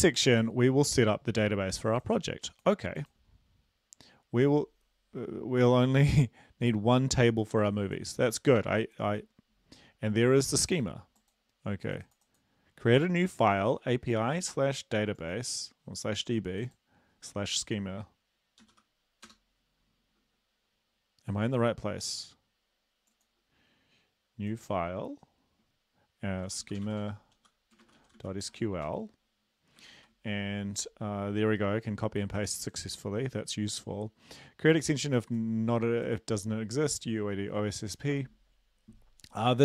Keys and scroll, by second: 18.6 typing, 19.3 Return, 26.5-29.8 typing, 30.0 ctrl+v.